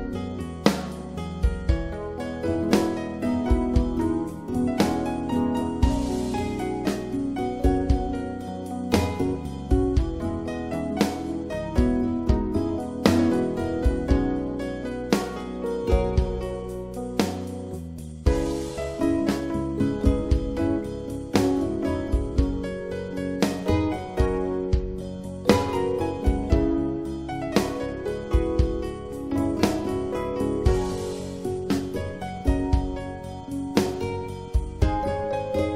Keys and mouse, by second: 0.5 click, 2.5 click, 6.9-9.3 right drag, 10.5-11.9 right drag, 15.3 middle click, 17.0-19.3 middle drag, 19.7-22.4 middle drag, 22.9 click, 23.3 middle click, 23.9 click, 24.0 middle click, 24.3 click, 29.9-31.2 middle drag, 31.3-33.5 middle drag.